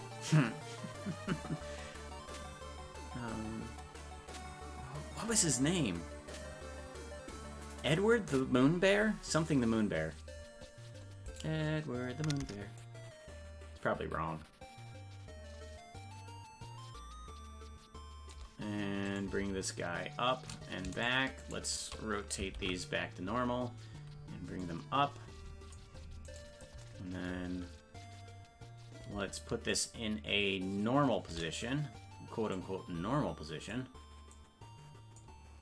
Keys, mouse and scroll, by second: 11.4 right click, 12.8-18.3 shift+drag, 19.2 right click, 21.0 shift+right click, 22.6 alt+r, 24.6-25.7 drag, 26.3 right click, 29.7-31.3 shift+drag, 32.5-33.7 drag, 34.3 click.